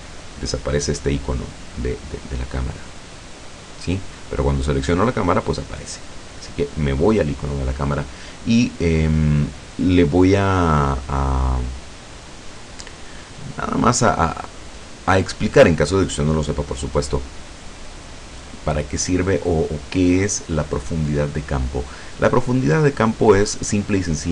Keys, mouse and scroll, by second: 3.4 right click, 5.0 right click, 6.6 click, 9.2-9.6 scroll down 1.